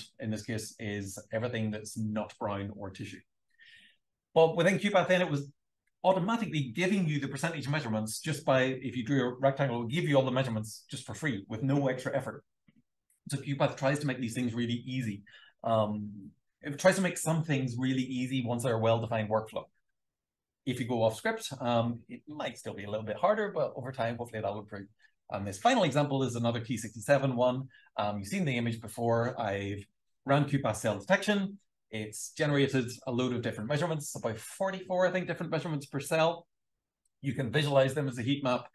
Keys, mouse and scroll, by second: 0.1 click, 0.8 click, 0.9 click, 3.8 shift+scroll down 2, 4.8 r, 5.0 shift+scroll up 1, 5.8-7.2 drag, 7.6 super+l, 10.0 Right, 22.5 scroll up 2, 23.6 shift+scroll up 2, 23.8 shift+scroll, 24.4 click, 33.5-34.1 scroll up 2, 34.3 click, 34.4 d, 34.9 d, 35.4-35.7 shift+scroll down 2, 36.4 super+l.